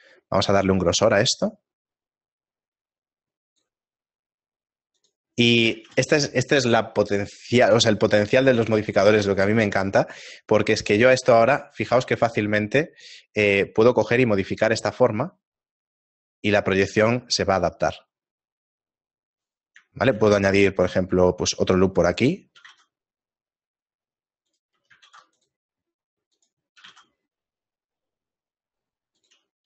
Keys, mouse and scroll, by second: 5.0 click, 5.8 a, 9.6 shift+middle click, 10.9 right click, 11.2 Tab, 11.6 shift+middle click, 12.2 right click, 12.6 shift+middle click, 14.8 shift+middle click, 14.8 g, 20.0 shift+middle click, 20.4 ctrl+r, 23.0 g, 25.1 ctrl+r, 26.8 g.